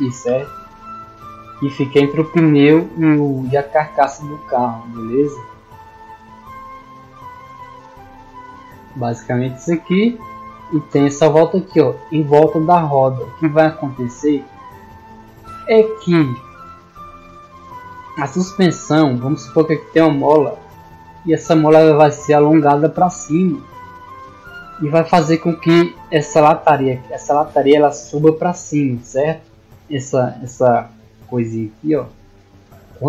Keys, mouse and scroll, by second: 19.9 d, 21.2-24.8 drag, 26.7 d, 26.9-29.0 drag, 30.5-33.0 drag.